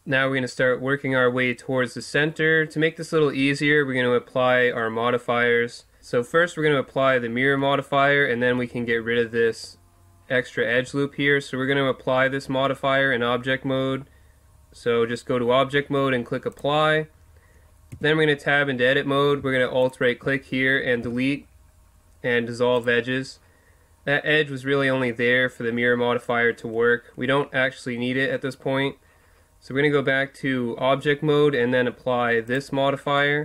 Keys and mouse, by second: 7.5 Tab, 10.7 Tab, 16.5-17.9 drag, 17.9 Tab, 21.0 Delete, 28.6 Tab, 32.5-33.4 drag.